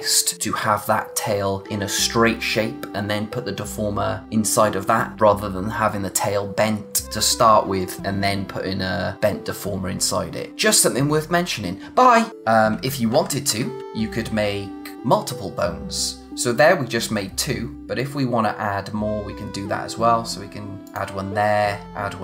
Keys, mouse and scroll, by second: 12.8 ctrl+z, 20.9 click.